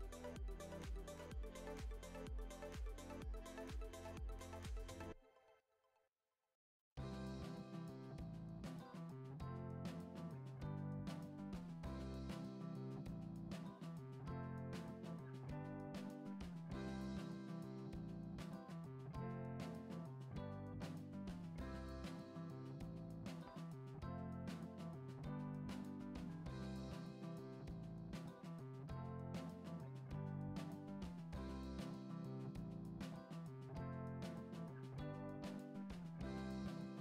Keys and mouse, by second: 1.3 middle click, 1.9 g, 3.1 g, 5.7 Tab, 6.7 click, 7.6 click, 8.3-8.6 shift+middle drag, 9.2 click, 9.4 middle click, 9.5 ctrl+z, 10.3 g, 17.0-17.4 middle drag, 17.7-18.7 middle drag, 18.9-19.3 middle drag, 19.7 middle click, 20.1 ctrl+r, 23.3 shift+middle drag, 24.0 ctrl+b, 27.5 click, 28.0 click, 29.4 shift+click, 30.1 shift+click, 30.9 shift+drag, 31.2 middle click, 31.8 ctrl+z, 32.2 shift+click, 32.5 middle click, 33.0 e, 34.0 s, 36.2 ctrl+Tab, 36.8-37.0 middle drag.